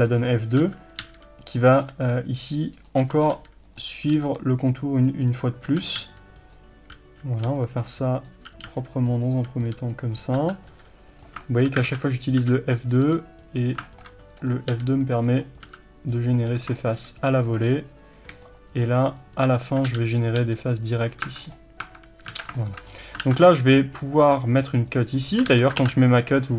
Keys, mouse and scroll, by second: 0.2 click, 0.6 f, 1.9 g, 2.9 click, 3.1 f, 4.2 g, 4.6 click, 5.7 f, 7.5 g, 8.3 click, 8.4 f, 9.5 g, 10.2 click, 10.4 f, 11.5 shift+middle click, 11.9 alt+a, 12.0 click, 12.5 f, 13.6 click, 13.9 shift+middle click, 14.4 click, 14.7 g, 15.7 f, 16.8 shift+middle click, 17.5 click, 19.8 f, 20.2 click, 20.4 g, 21.3 Tab, 21.4-21.8 scroll down 1, 21.8 Tab, 22.4 alt+a, 22.6-24.9 shift+middle drag, 22.9-23.2 scroll up 1, 23.2 ctrl+r, 24.9 click, 25.5 ctrl+z.